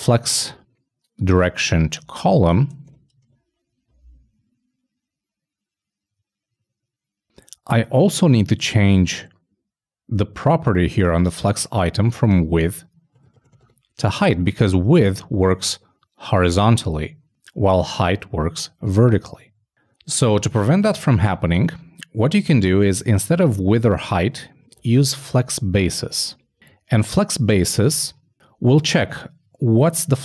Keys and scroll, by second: 3.3 super+n, 3.5 super+s, 19.0 super+s, 23.9 alt+shift+Left, 24.8 alt+shift+f, 26.5 super+s.